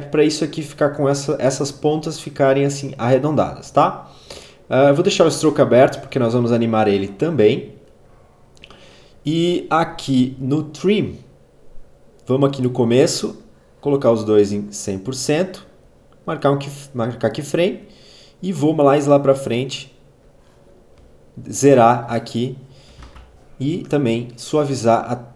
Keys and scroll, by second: 22.7 F9.